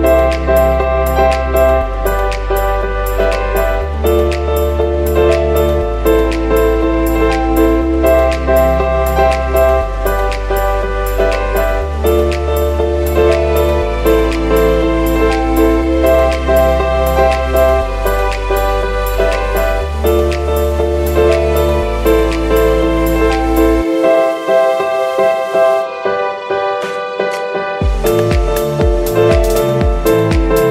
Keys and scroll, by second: 2.6 v, 6.0 super+x, 6.9 z, 14.7 v, 16.6 v, 18.4 super+y, 20.0 v.